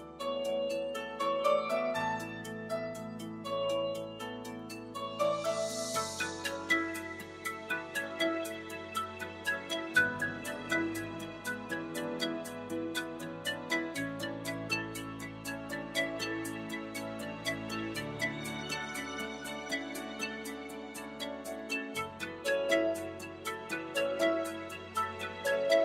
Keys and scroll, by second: 12.4 3.